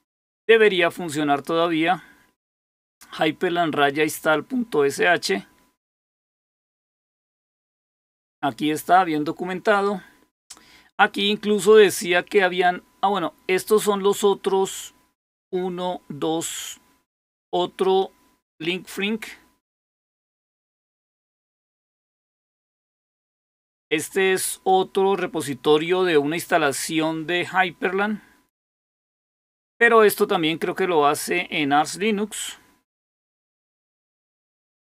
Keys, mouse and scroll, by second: 4.8-5.8 scroll down 2, 5.8-6.5 scroll down 1, 7.3-9.3 scroll down 2, 9.3-10.4 scroll down 1, 10.4-10.8 scroll down 1, 20.0-22.8 right drag, 22.8 click, 24.4 click, 29.4-30.0 scroll down 1, 31.0-31.6 scroll down 1, 32.4-33.8 scroll up 1, 33.8 click.